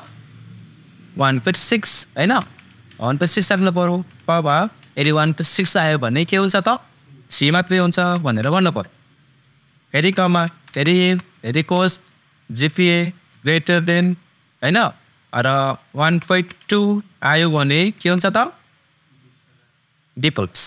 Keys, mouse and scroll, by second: 5.7 typing, 8.1 shift+super+c, 10.6 super+i, 10.9 super+f, 11.5 shift+super+9, 12.5 super+click, 13.7 shift+super+,, 17.5 super+,.